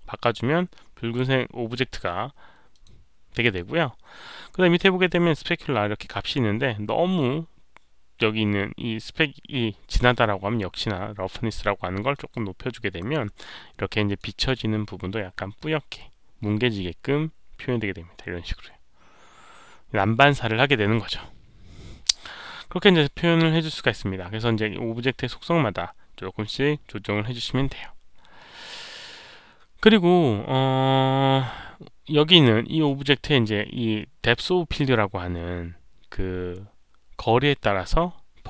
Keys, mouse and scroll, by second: 1.0-1.7 drag, 2.6 click, 7.9 click, 12.0 click, 14.0 click, 19.3 click, 22.9 click, 23.4 click, 35.0 scroll down 1, 35.9 scroll up 1, 36.4-36.8 scroll up 1.